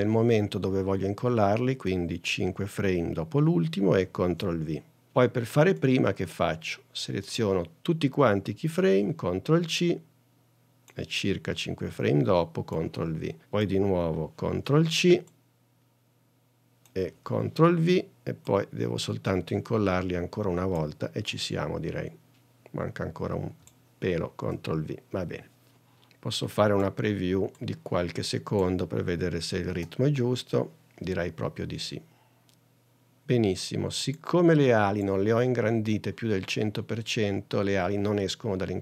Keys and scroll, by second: 4.5 super+v, 8.9 super+c, 11.9 super+v, 15.1 super+c, 29.9 space.